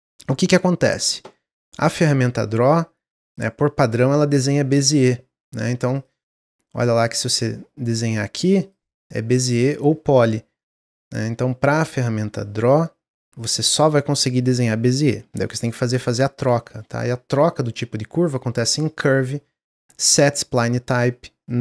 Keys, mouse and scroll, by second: 1.8-4.9 drag, 4.9 ctrl+z, 5.3 click, 7.3-11.5 drag, 11.6-14.6 drag, 16.1-19.2 drag.